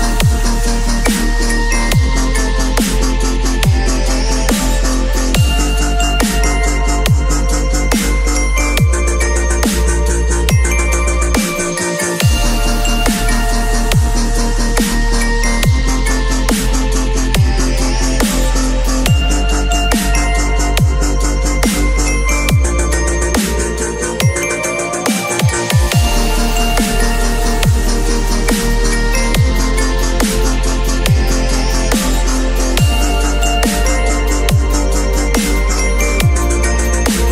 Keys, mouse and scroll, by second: 5.1 shift+click, 16.8-18.5 shift+drag, 23.9 ctrl+d.